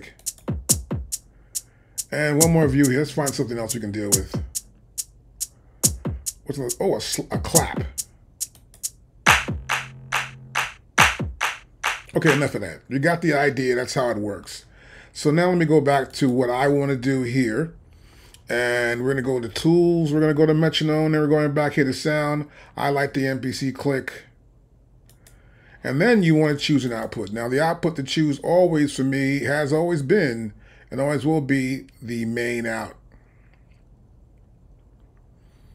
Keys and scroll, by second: 12.1 space.